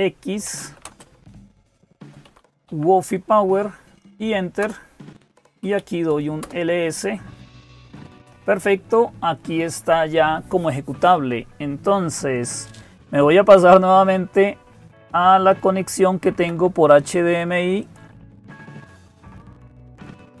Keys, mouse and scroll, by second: 0.0-20.4 typing, 17.6-20.4 drag.